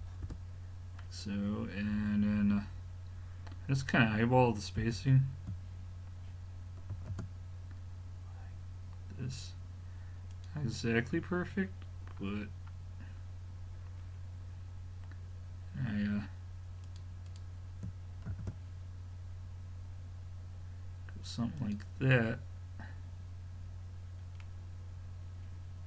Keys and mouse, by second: 4.8 g, 10.9-12.1 middle drag, 14.0-16.9 middle drag, 16.9-19.0 drag, 18.3 shift+d, 24.2 middle click.